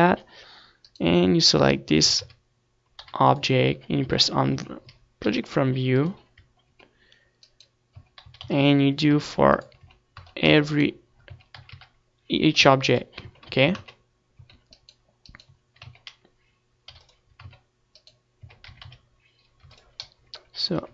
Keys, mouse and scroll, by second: 0.3 right click, 0.5 Tab, 1.1 click, 2.6 Tab, 3.0 a, 3.1 a, 4.0 u, 5.1 Tab, 5.6 Tab, 6.3 u, 7.4-8.7 middle drag, 7.8 Tab, 8.7-10.2 right drag, 9.0 Tab, 9.3 a, 9.5 a, 10.2 u, 10.9 Tab, 11.3 Tab, 11.5 Tab, 11.9-13.4 right drag, 12.3 Tab, 12.6 a, 12.7 a, 13.6 u, 14.3 Tab, 14.6-15.9 middle drag, 14.8 Tab, 15.4 Tab, 16.9 Tab, 17.9 u, 18.5 Tab, 19.4 Tab, 19.7 a, 19.8 a, 20.6 u.